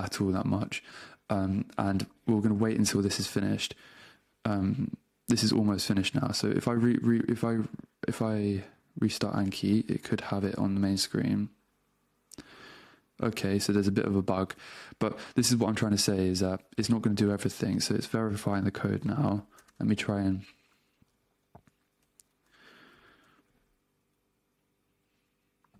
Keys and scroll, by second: 0.4 super+Tab, 5.9 super+Tab, 7.6 super+q, 9.5 super+space, 10.2 Return, 14.6 super+Tab, 19.7 super+space, 20.3 Return, 21.1 super+q, 21.7 super+space, 21.9 a, 22.5 super+space, 23.2 Return.